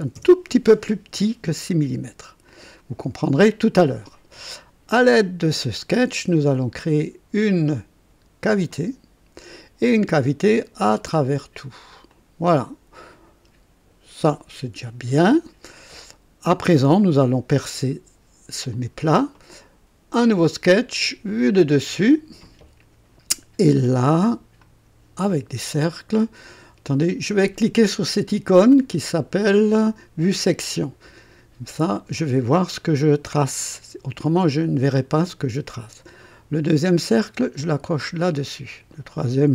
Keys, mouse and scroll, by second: 0.1 KP_Enter, 2.4 click, 3.1 typing, 8.7 click, 10.4 click, 11.2 click, 12.1-14.4 drag, 15.1 click, 18.7 click, 20.2 click, 21.3 click, 22.0 click, 24.6 click, 30.2 click, 33.7 click, 34.8 click, 37.8 click, 38.9 click.